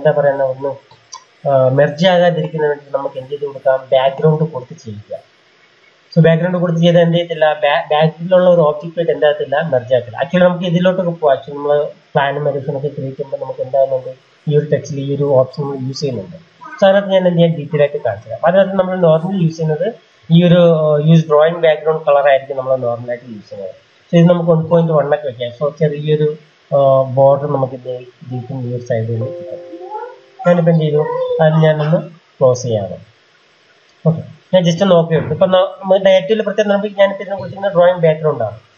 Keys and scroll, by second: 23.1-24.3 typing, 31.8 Delete.